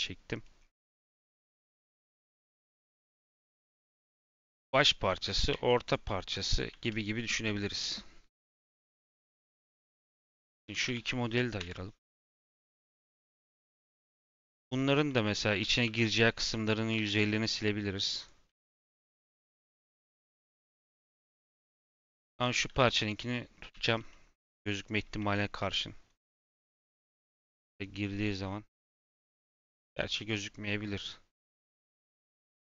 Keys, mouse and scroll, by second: 1.1 click, 1.4 scroll down 5, 1.6-1.9 middle drag, 1.9 scroll, 2.0 scroll up 6, 2.3 middle drag, 2.5 scroll down 6, 2.8 middle click, 3.1-3.4 scroll up 4, 3.4 middle click, 4.4 click, 5.3 click, 5.8 shift+click, 6.2 shift+click, 8.5 click, 10.3 click, 10.6 Tab, 10.8 a, 11.5 p, 12.8 Tab, 13.3 click, 13.6 click, 14.0 shift+click, 14.4-14.9 middle drag, 14.9 /, 15.3 middle drag, 15.5 Tab, 15.8 3, 15.8 middle click, 17.2 click, 17.9 click, 18.4 x, 19.5 middle click, 20.3 click, 20.8 x, 21.6 /, 22.0 Tab, 22.3 click, 23.6 /, 24.0 middle click, 25.0 /, 25.2 scroll down 1, 25.5 middle click, 26.2 click, 26.5 middle click, 26.7 g.